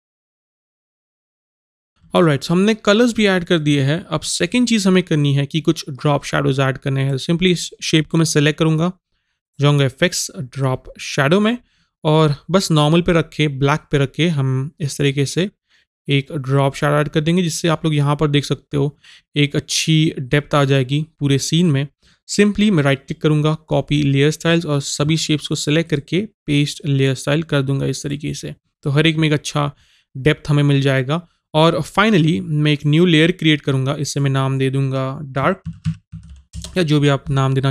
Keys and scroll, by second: 35.7 shift+d, 35.9 a.